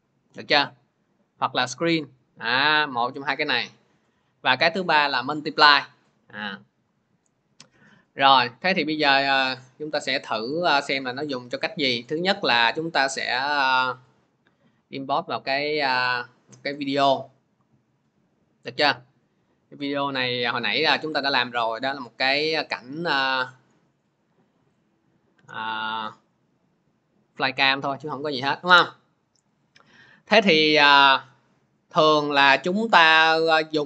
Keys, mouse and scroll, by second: 8.2 click, 8.9 click, 10.4 click, 10.7 scroll, 12.2-13.0 scroll, 13.7 click, 13.9 click, 16.5 click, 17.5-18.9 scroll, 21.6-22.6 middle drag, 24.6-29.6 drag, 30.6 click, 30.8 click, 33.5 click.